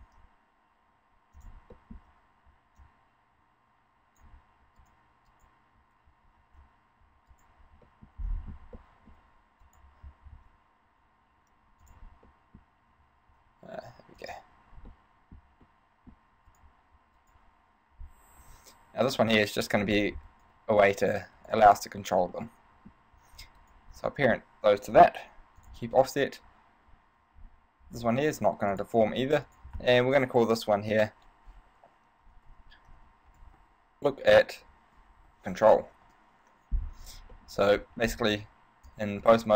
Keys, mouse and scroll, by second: 0.2 shift+s, 1.9 shift+middle click, 3.0 click, 4.9 right click, 5.5 right click, 6.6 alt+shift+s, 7.7 right click, 8.1 shift+middle click, 8.5-9.0 scroll up 5, 9.0 shift+middle click, 9.8 right click, 10.4 alt+shift+s, 12.1 click, 12.4 middle click, 13.4 ctrl+alt+s, 14.5 click, 15.2 middle click, 15.8 middle click, 16.7 right click, 17.4 shift+right click, 18.5 s, 19.9 click, 20.5 right click, 21.6 right click, 22.5 middle click, 23.8 shift+right click, 24.2 shift+right click, 25.0 ctrl+p, 26.1 right click, 28.9 click, 29.6 click, 37.5 middle click, 38.2-38.5 scroll down 3, 38.5 Tab, 39.4 ctrl+Tab.